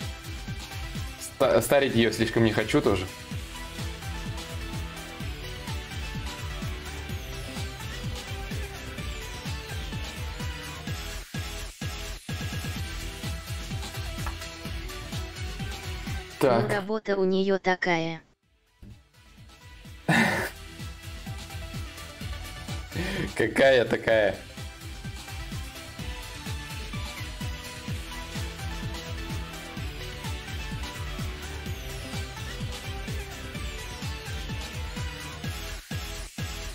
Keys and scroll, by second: 13.8 ctrl+s.